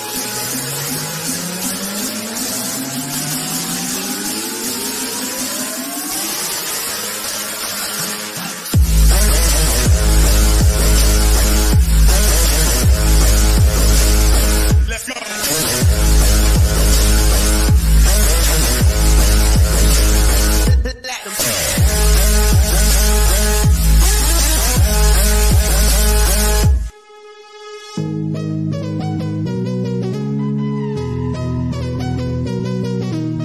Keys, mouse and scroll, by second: 1.0-2.1 scroll up 1, 3.7 click, 10.3 scroll up 1, 18.0 click, 19.8 scroll up 1, 27.0 click, 30.9 click, 32.0 scroll up 1.